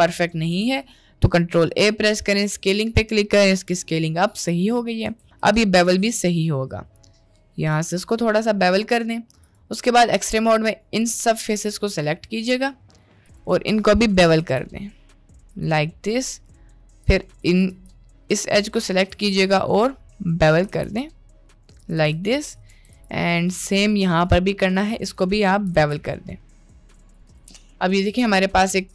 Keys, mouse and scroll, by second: 0.6 n, 1.6 ctrl+a, 3.5 n, 4.5 n, 5.1 Tab, 5.7 ctrl+b, 9.5 click, 10.3-11.3 drag, 11.3 middle click, 13.2 click, 13.7 middle click, 14.5 ctrl+b, 15.8 middle click, 17.7 shift+click, 18.0 middle click, 19.6 middle click, 20.2 middle click, 20.7 ctrl+b, 22.0 Tab, 22.2 middle click, 22.7 Tab, 22.9 click, 24.7 shift+click, 25.9 ctrl+b, 27.1 click, 27.3 Tab, 27.7-28.7 middle drag.